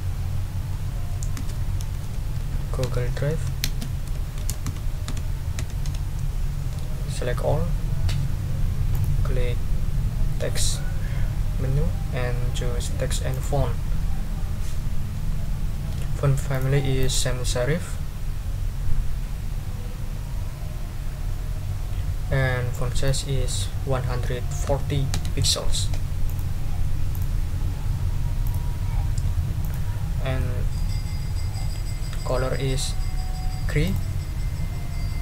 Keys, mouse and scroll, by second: 1.3-6.3 typing, 7.2 ctrl+a, 8.9 click, 13.3 click, 15.9 scroll up 2, 16.5 click, 17.0 click, 22.7 click, 24.1 1, 24.7 4, 25.1 0, 26.2 click, 27.1 click, 28.4 click, 29.6 click, 30.4 middle click, 30.6 right click, 31.3-31.6 scroll down 2, 33.8 click.